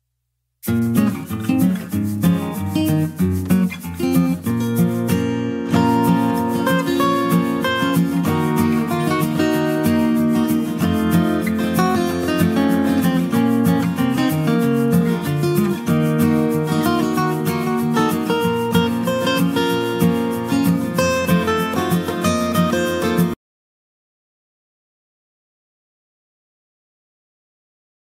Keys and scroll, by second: 6.3 ctrl+d, 8.2 ctrl+space.